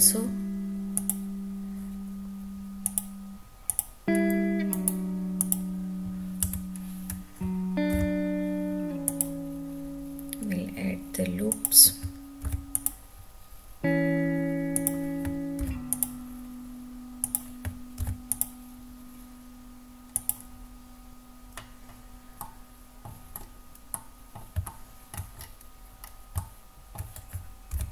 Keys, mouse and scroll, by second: 2.8 click, 3.7 click, 4.7 right click, 6.4 Tab, 7.9 ctrl+r, 11.5 click, 12.4 ctrl+r, 14.7 click, 15.5 ctrl+r, 17.2 click, 18.0 ctrl+r, 20.1 click, 22.3 middle click, 23.4 scroll down 1, 23.9 middle click, 24.6 shift+middle click, 25.4 scroll down 1, 26.0 scroll down 1, 26.4 shift+middle click, 27.7 ctrl+r.